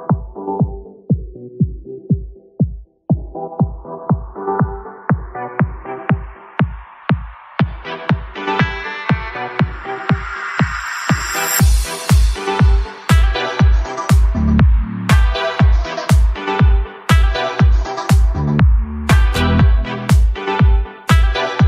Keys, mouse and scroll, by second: 0.0 scroll down 1, 0.0 shift+a, 2.1 KP_1, 2.7 g, 3.1 z, 5.0 click, 5.3 scroll down 1, 5.8 s, 6.6 click, 6.9-8.3 middle drag, 8.3-9.5 scroll up 3, 11.6 shift+a, 14.4 KP_0, 14.7 n, 16.7-17.3 drag, 17.4 click, 17.9-19.0 scroll down 6, 18.8-19.8 scroll up 2, 19.8 g, 20.3 z.